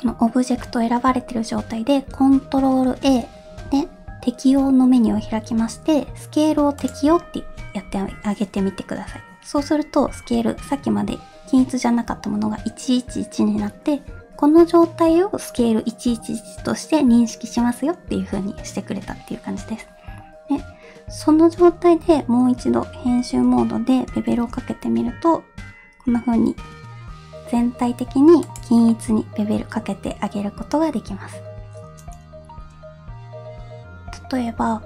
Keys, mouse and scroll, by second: 0.6 middle drag, 2.8 ctrl+a, 22.1 Tab, 23.3 2, 24.3 ctrl+b, 28.9-31.2 middle drag, 33.6-34.8 middle drag, 33.6-34.3 scroll down 1.